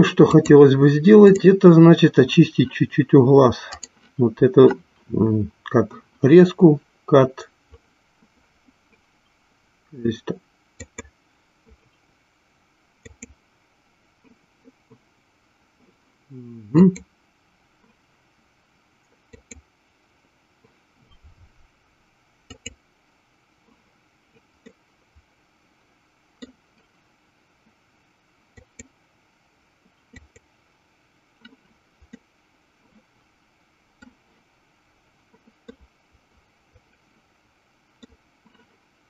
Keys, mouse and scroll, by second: 0.2-1.9 drag, 3.8 click, 11.3 click, 13.5 click, 19.8 click, 23.0 click, 24.7-26.8 middle drag, 29.0 click, 30.8 click, 32.3-34.5 middle drag, 35.9-38.2 middle drag.